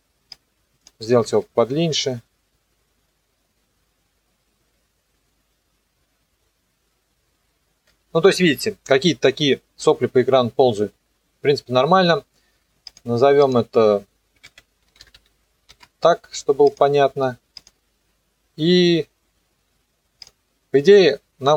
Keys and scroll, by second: 1.2 KP_0, 7.8 KP_0, 14.2-15.7 typing.